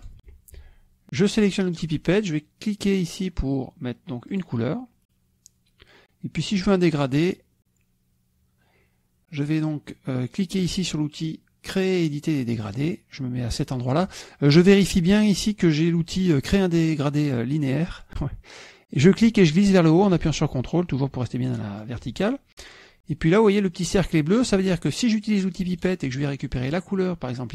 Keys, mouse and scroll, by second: 0.9 shift+drag, 2.5 click, 5.2 click, 13.5 click, 20.0-22.8 drag, 23.1 ctrl+click, 26.5 click.